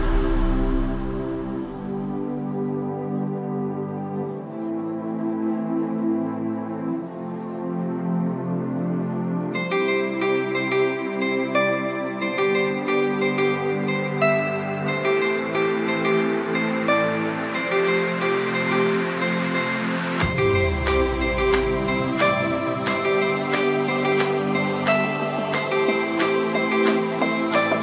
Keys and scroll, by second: 9.8 ctrl+d.